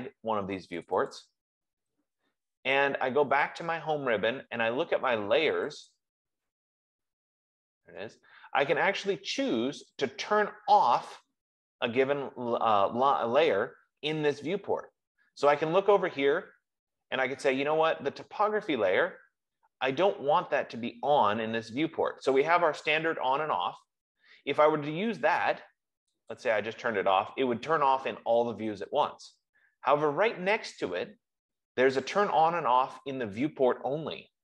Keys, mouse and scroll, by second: 1.1 click, 1.6 click, 4.0 click, 6.3 click, 26.8 click, 29.6 click.